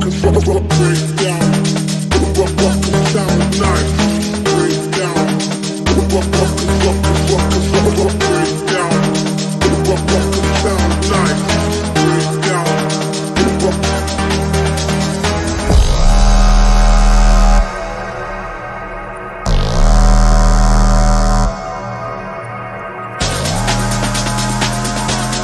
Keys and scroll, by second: 3.3 F3, 6.3 ctrl+z, 21.5 shift+F2, 22.0 Escape.